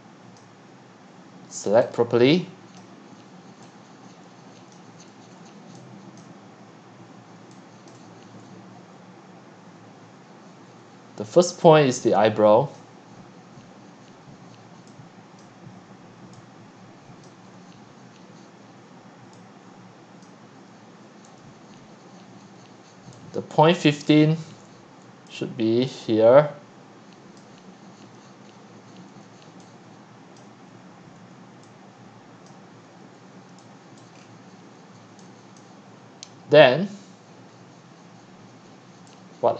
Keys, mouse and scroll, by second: 0.4-5.3 drag, 5.3-5.7 middle drag, 5.3 scroll, 6.4-6.7 scroll, 7.4 x, 7.9 click, 8.1 q, 11.5-11.9 scroll up 1, 11.9-12.7 drag, 12.8-13.4 drag, 13.4-15.4 middle drag, 15.4-17.0 drag, 17.5-18.4 scroll, 20.3-22.4 drag, 23.1-24.8 typing, 27.4-28.0 drag, 28.0-28.4 scroll down 2, 28.6 click, 29.2 click, 29.5-32.0 typing, 32.5 click, 32.9 scroll up 1, 33.4 scroll down 2, 34.0 click, 34.2 scroll up 1, 34.5 click, 35.6 click, 36.7-37.0 scroll, 37.4 scroll.